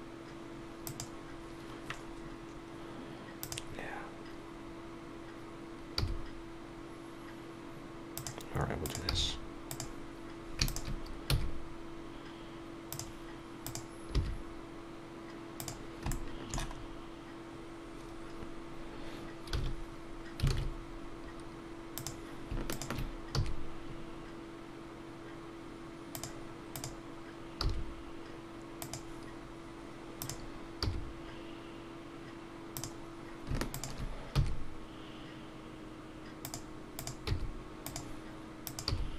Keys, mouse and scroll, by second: 3.4 click, 6.0 g, 9.7 g, 10.7 shift+click, 12.9 e, 13.6 click, 16.1 shift+middle click, 16.8-17.1 scroll up 2, 17.6-19.0 scroll down 1, 26.1 e, 26.7 click, 28.8 g, 32.7 g, 33.7 shift+click, 36.4 e, 37.0 click, 37.8 g.